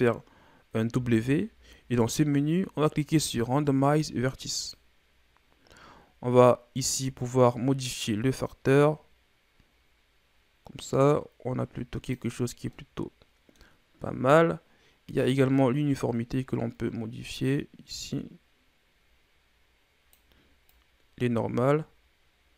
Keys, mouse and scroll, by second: 0.9 w, 6.8-9.8 drag, 12.7-15.2 middle drag, 15.2-18.2 drag, 20.7-22.5 drag.